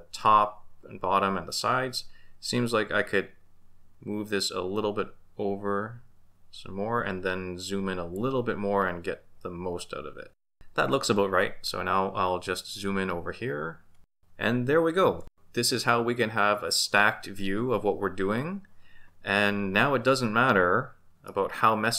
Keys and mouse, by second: 3.1-8.2 drag, 21.3-21.9 middle drag.